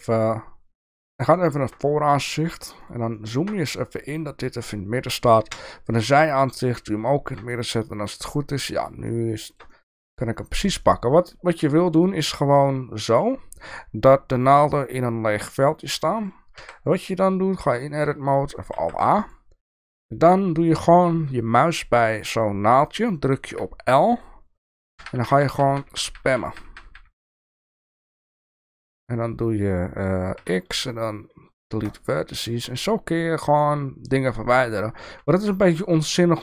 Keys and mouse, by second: 0.9 KP_1, 1.5 shift+middle click, 2.4-3.0 shift+middle drag, 3.3 shift+middle click, 4.0 shift+middle click, 5.4 KP_3, 6.5 middle click, 7.5-8.8 middle drag, 9.2 shift+middle click, 9.9 middle click, 10.8 shift+middle click, 11.7-13.2 middle drag, 16.1 click, 16.9 Tab, 18.8 alt+a, 23.5 l, 25.0-26.7 typing, 26.9 click, 27.1 click, 27.3 click, 27.5 click, 27.7 click, 27.9 click, 28.1 click, 28.3 click, 28.5 click, 28.7 click, 30.3 x, 33.7 middle click, 35.1 Tab, 35.4 middle click.